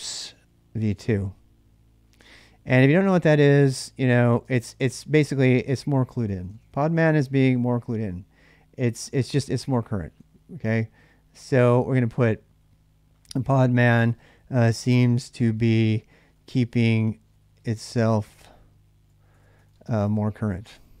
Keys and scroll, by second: 0.0-7.6 typing, 9.5 ctrl+[, 9.6 j, 11.2-21.0 typing.